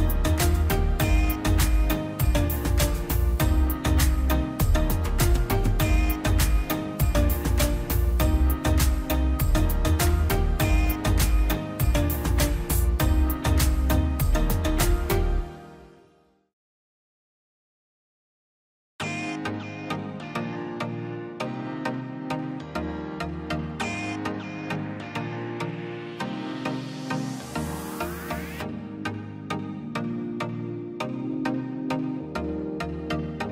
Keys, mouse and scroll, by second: 2.6-2.9 scroll down 1, 2.9 middle click, 3.1 scroll up 1, 3.3 click, 3.3 click, 3.7 scroll down 1, 4.3 click, 4.9 scroll up 1, 5.1 click, 5.7 scroll down 1, 6.0-7.4 middle drag, 7.4 click, 7.6 scroll up 1, 8.1 middle click, 8.5 scroll down 1, 9.4 click, 9.5 scroll up 1, 9.8 click, 12.1 Escape, 12.7 click, 13.1 Escape, 13.5 click, 17.6 click, 19.7 click, 21.3 click, 23.4 click, 24.7-25.3 scroll up 1, 25.6 Escape, 26.0 click, 29.2 click, 29.3-29.6 scroll down 1, 30.0 click.